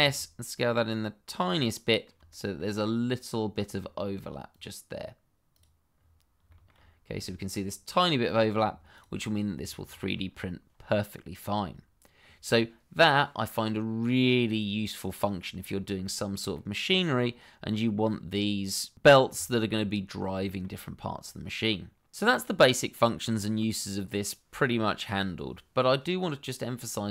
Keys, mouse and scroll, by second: 0.0 s, 1.3 click, 1.7 middle click, 2.4 shift+middle click, 2.6-3.7 scroll up 2, 3.8-4.5 scroll down 1, 4.5 click, 5.9-6.4 scroll down 1, 6.7-7.0 scroll up 1, 7.3 shift+middle click, 8.2-8.6 scroll down 1, 8.9 click, 9.2 middle click, 10.1 shift+middle click, 10.2-11.1 scroll up 1, 11.1 middle click, 13.6 middle click, 15.7 scroll down 1, 16.0 middle click, 19.5 shift+middle click, 19.9-20.3 scroll up 1, 20.4 shift+middle click, 20.5 middle click.